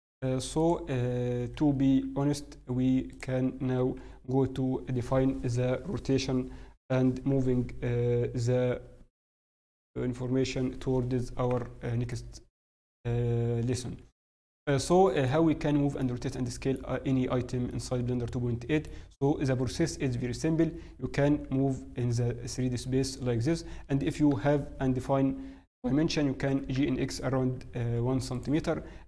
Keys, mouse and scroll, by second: 0.5 click, 0.5-1.1 scroll down 3, 1.1-2.0 scroll up 1, 2.0 g, 3.9 scroll up 2, 3.9 t, 12.1 middle click, 16.8 middle click, 16.8-17.3 scroll up 1, 17.3-18.1 scroll down 3, 17.6 middle click, 17.6-18.1 scroll up 2, 19.2-20.3 scroll down 1, 21.4-21.9 scroll down 2, 21.4 g, 23.8-24.4 scroll down 2, 24.3 KP_7, 26.5 g.